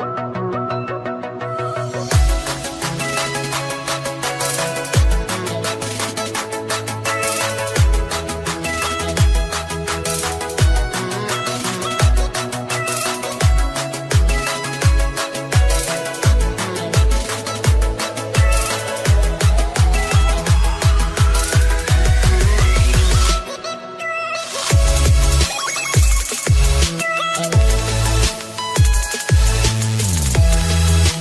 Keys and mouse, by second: 3.8 click, 9.1 click, 14.8 click, 17.2 click, 19.3 d, 22.0 Return, 22.9 Right, 22.9 Return, 22.9 BackSpace, 22.9 d, 28.8 click.